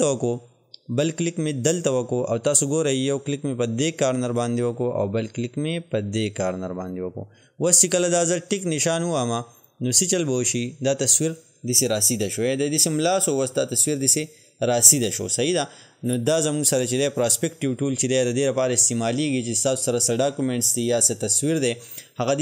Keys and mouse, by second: 4.3 click, 6.8 click, 9.9 click.